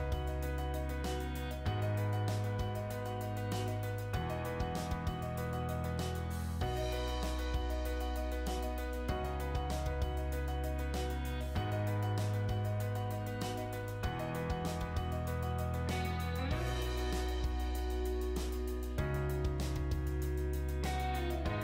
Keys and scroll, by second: 3.4 m, 3.7 space, 14.5 m, 14.6 space.